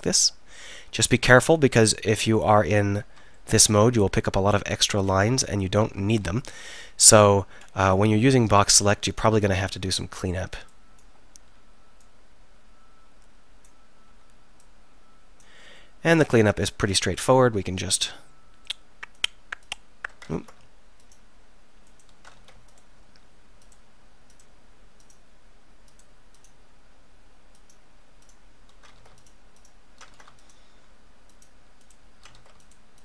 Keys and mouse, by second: 1.9 b, 6.6 KP_1, 6.9 KP_3, 10.8-12.0 middle drag, 12.0-13.7 drag, 13.7 b, 15.5 b, 18.7 middle click, 19.2-20.4 drag, 20.4 ctrl+z, 22.4 ctrl+z, 29.0 ctrl+z, 30.2 ctrl+z, 32.4 ctrl+z.